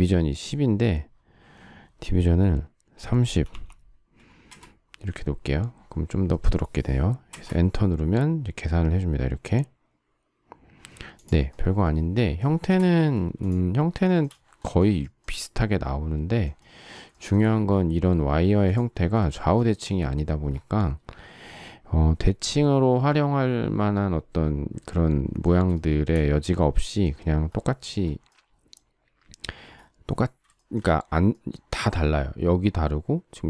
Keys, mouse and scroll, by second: 3.2 typing, 4.4 Return, 7.3 Return, 12.4 shift+middle click, 13.1 space, 14.2 shift+middle click, 15.0 shift+middle click, 17.1 shift+middle click, 19.7 shift+middle click, 25.7 shift+middle click, 30.5 shift+middle click.